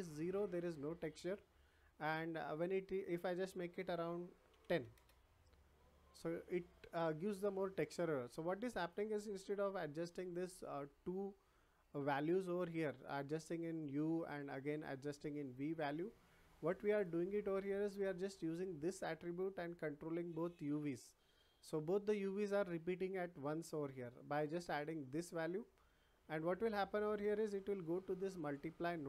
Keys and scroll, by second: 4.5 1, 4.9 Return.